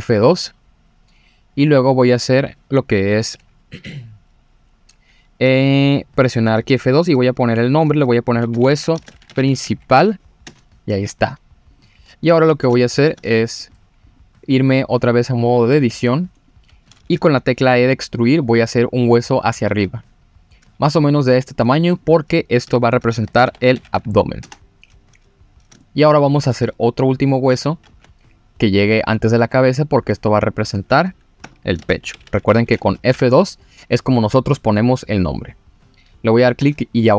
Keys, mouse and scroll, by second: 11.7 click, 12.3 scroll down 2, 12.8 shift+middle drag, 14.1 click, 14.5 click, 15.4-15.7 scroll up 2, 15.7 Tab, 16.4 click, 18.1-18.6 scroll down 2, 19.6 e, 19.6 z, 21.5 click, 21.9 click, 22.6 F2, 25.8 shift+middle click, 27.3 click, 27.8 e, 27.9 z, 30.0 click, 30.5 click, 31.4 F2.